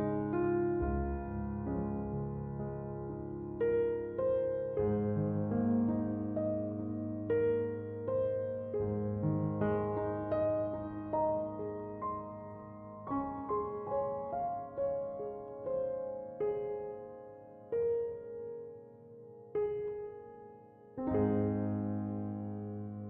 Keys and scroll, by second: 6.8 Escape.